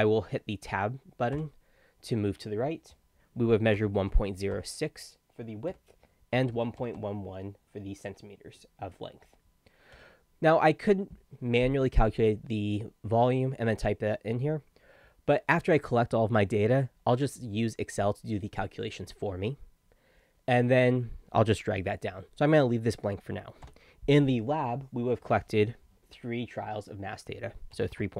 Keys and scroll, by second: 3.6-5.0 typing, 5.7 Tab, 6.1-7.5 typing, 27.7-28.1 typing.